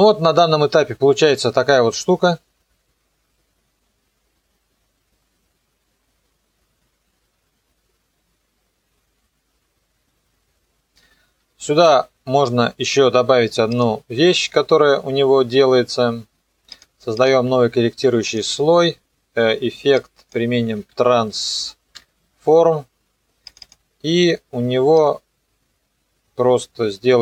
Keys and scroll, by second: 20.6-22.0 typing.